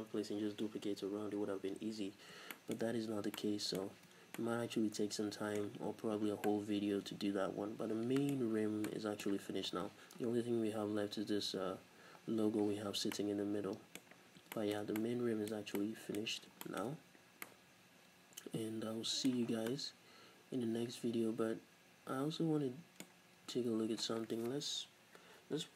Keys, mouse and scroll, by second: 2.0-25.7 middle drag, 2.0-2.6 scroll up 2, 3.9 z, 4.2 scroll down 2, 6.2 scroll down 2, 9.5-10.7 scroll up 2, 10.7-12.7 scroll up 1, 12.7-13.2 scroll up 1, 16.3-16.7 scroll up 2, 19.5 scroll down 1.